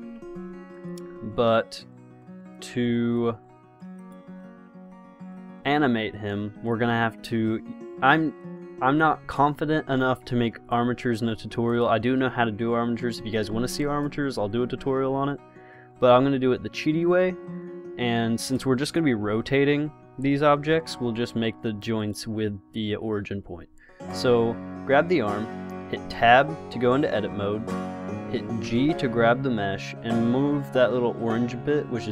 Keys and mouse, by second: 0.0 Escape, 2.8-4.2 drag, 5.9 click, 19.5 r, 21.0 ctrl+z, 26.3 Tab, 28.9 g.